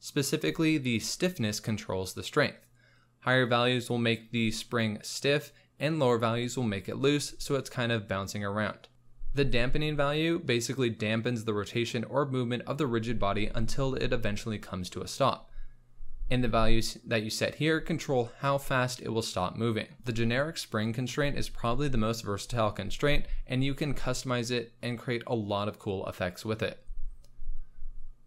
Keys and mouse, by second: 0.3 click, 1.1 space, 8.8 space, 8.9 z, 9.0 space, 18.2 space, 19.1 click, 19.9 z, 21.6 space.